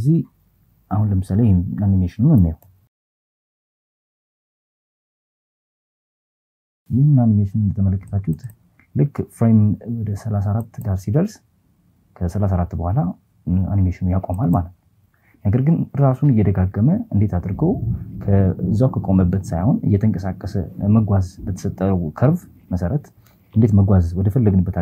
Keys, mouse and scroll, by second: 3.6 click, 6.2 click, 6.6 click, 9.4 click, 12.9 click.